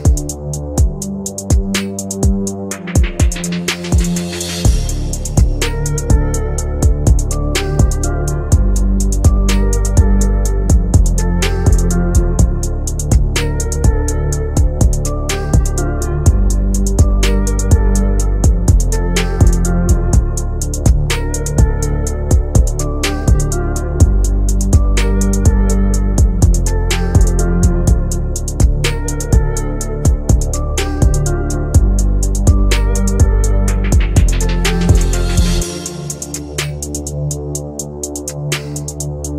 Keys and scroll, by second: 20.4 F3, 25.8 shift+F2, 26.6 Escape, 28.2 F3.